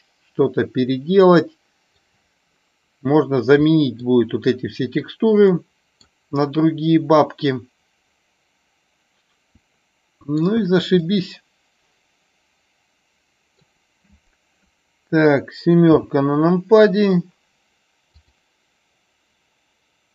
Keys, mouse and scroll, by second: 0.0-0.3 middle drag, 0.5 middle drag, 0.7-2.0 middle drag, 3.7 middle drag, 5.5-6.1 middle drag, 6.5-10.5 middle drag, 11.0-13.6 middle drag, 15.8 KP_7.